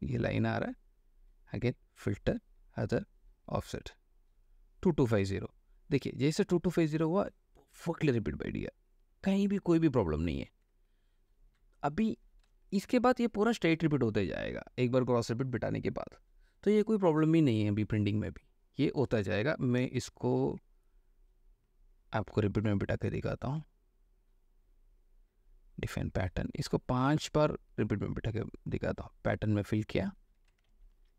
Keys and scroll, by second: 7.1 ctrl+space, 12.9 ctrl+d, 30.9 ctrl+alt+c.